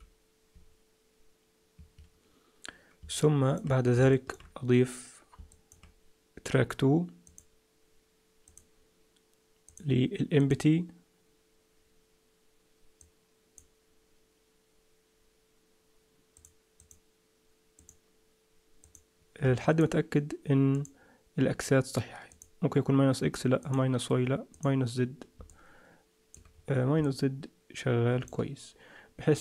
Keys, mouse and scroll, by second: 3.1 middle click, 4.1 shift+middle click, 4.7-5.3 scroll down 1, 5.3 scroll down 1, 5.5 middle click, 7.3 click, 9.7 click, 13.0 click, 16.3 click, 16.7 click, 17.7 click, 18.8 click, 19.5 middle click, 20.7 click, 22.3 click, 24.5 click, 25.5 middle click, 26.5-26.9 scroll up 4, 27.0 middle click, 29.3 click.